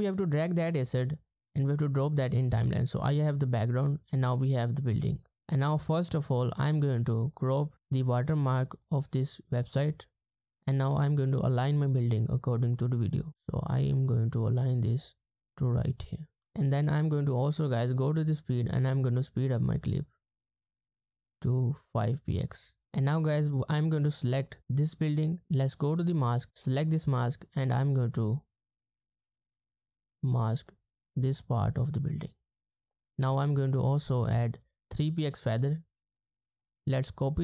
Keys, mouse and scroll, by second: 5.8 ctrl+scroll up 1, 16.4 space, 22.8 space, 33.8 double click, 34.9 Return, 34.9 3, 36.6 right click.